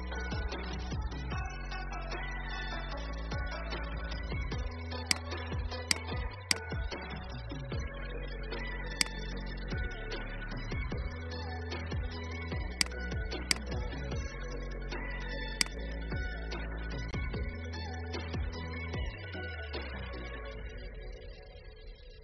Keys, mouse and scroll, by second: 0.0-2.3 scroll up 1, 3.9-4.5 alt+scroll down 1, 5.1 click, 5.8 right click, 13.4-17.5 drag, 19.0 ctrl+x.